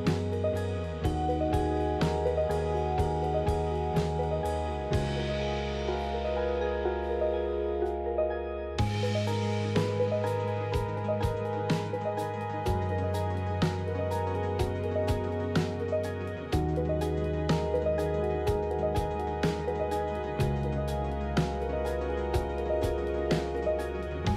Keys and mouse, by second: 0.0 ctrl+r, 1.9 ctrl+z, 3.2 f, 3.9 alt+click, 4.5 click, 5.0 f, 5.4 click, 6.4 ctrl+r, 13.5 Tab, 14.4 middle click, 16.8 click, 18.7 click, 19.7 Tab, 20.6 KP_3, 21.6 shift+click.